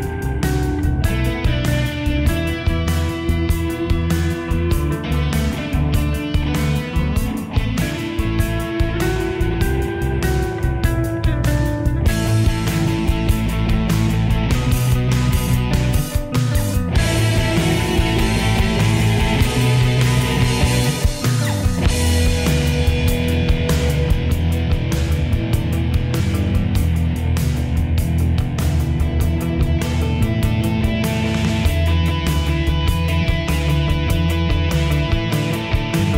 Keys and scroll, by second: 12.4 ctrl+1, 22.8 ctrl+-, 24.0 ctrl+=, 25.0 ctrl+-.